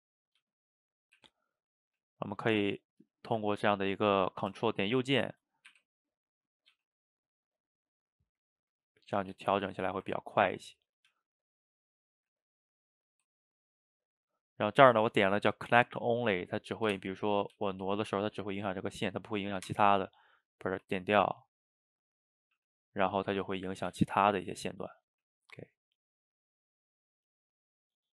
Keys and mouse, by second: 0.4 g, 1.2 r, 2.0 g, 3.1 shift+middle click, 3.5 a, 3.7 a, 3.9-5.0 middle drag, 5.0 ctrl+right click, 5.7 r, 6.5 click, 6.7 g, 7.9-9.7 middle drag, 9.7 a, 9.8 a, 10.8 click, 11.1 g, 12.1 click, 12.2 g, 13.0 click, 13.1 g, 14.1-17.1 drag, 20.3-22.5 drag, 22.6 g, 25.1 click, 25.3 g, 25.9 click, 26.1 g, 26.6 click, 26.7 g, 27.4 click, 27.5 g, 27.9-28.1 middle drag.